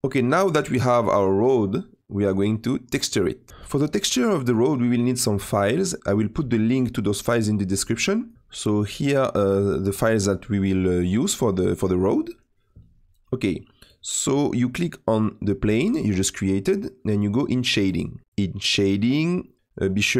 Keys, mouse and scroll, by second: 15.1 click, 17.8 click, 19.6 click.